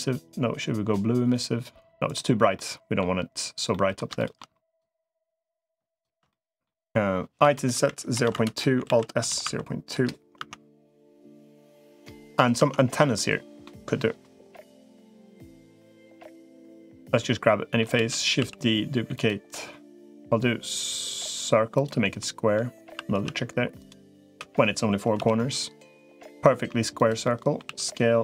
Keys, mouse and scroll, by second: 2.3 middle click, 3.5 middle click, 4.0 shift+middle click, 4.8 middle click, 6.1 middle click, 7.2 i, 8.8 alt+s, 10.2 Tab, 11.2 middle click, 12.4 Tab, 12.9 middle click, 15.8 click, 16.8 middle click, 17.8 shift+d, 18.2 s, 20.0-21.6 middle drag, 21.6 click, 22.0 middle click, 22.8 r, 24.2 r, 27.0 middle click, 27.6 s.